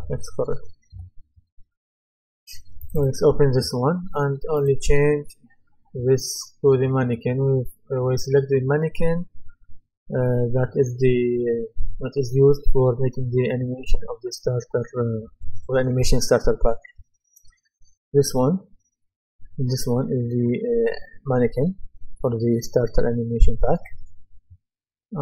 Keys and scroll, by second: 0.9 Return.